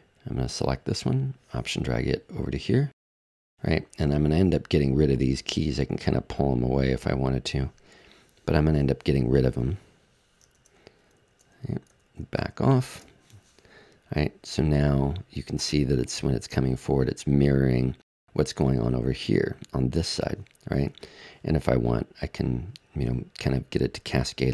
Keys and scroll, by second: 10.5 super+z, 12.7 super+z.